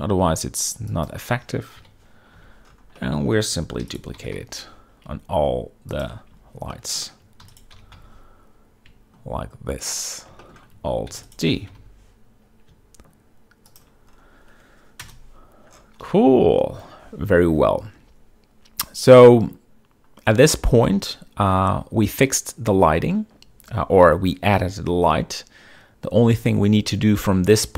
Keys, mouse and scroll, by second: 0.0 g, 0.3 z, 2.5 KP_7, 3.1 z, 3.7-4.0 shift+middle drag, 4.5 alt+d, 4.9 g, 5.1 y, 6.6 shift+click, 7.4 shift+middle drag, 8.2 alt+d, 8.2 click, 8.5 g, 8.7 x, 10.5 shift+click, 11.1 shift+middle drag, 11.8 alt+d, 12.0 click, 12.2 g, 12.4 y, 15.7 KP_0, 16.7 z.